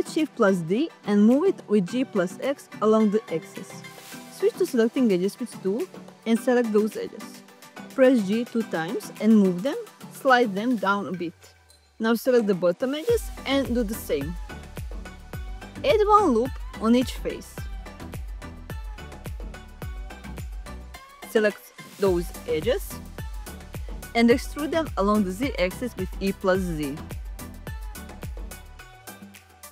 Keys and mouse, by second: 0.1 right click, 0.7 g, 0.9 x, 2.2 click, 5.8 2, 6.6 click, 7.6 shift+click, 8.3 g, 8.4 g, 9.3 click, 11.4 click, 12.8 g, 12.9 g, 15.4 click, 16.8 ctrl+r, 17.2 click, 18.7 ctrl+r, 19.6 click, 20.4 click, 22.1 e, 22.4 z, 25.0 g, 25.2 z, 25.8 click, 26.1 middle click, 28.3 g, 28.5 z.